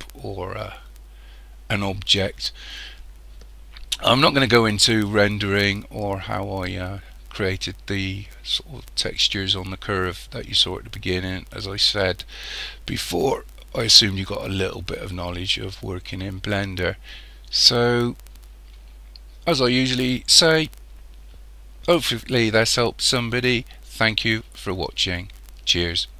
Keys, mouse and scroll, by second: 17.6-18.3 scroll up 2, 19.2-20.2 scroll down 2, 20.5-23.6 middle drag.